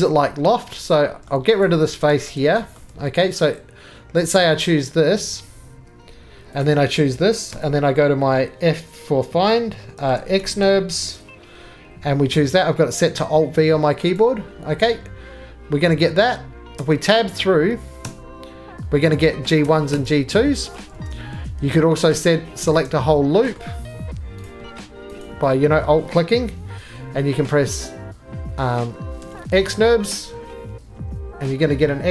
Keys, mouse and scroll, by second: 1.3 middle click, 1.3 scroll down 2, 1.6 click, 2.1 x, 2.8 middle click, 2.9 2, 4.3 click, 6.6 shift+click, 7.5 f, 9.8-11.2 typing, 14.1 click, 15.8-16.7 scroll, 16.7 Tab, 18.0 Tab, 19.1-19.6 scroll, 19.6 Tab, 19.9 Tab, 20.7 middle click, 21.0 ctrl+z, 22.8 click, 23.6 middle click, 24.4 click, 25.2 alt+click, 26.0 middle click, 29.3 alt+v, 30.0 middle click, 30.5 middle click, 31.9 middle click.